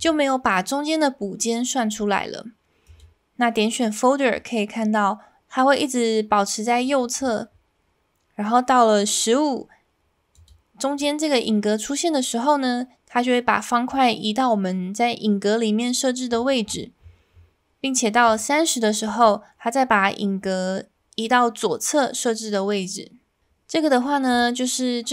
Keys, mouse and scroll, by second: 24.3-25.1 drag.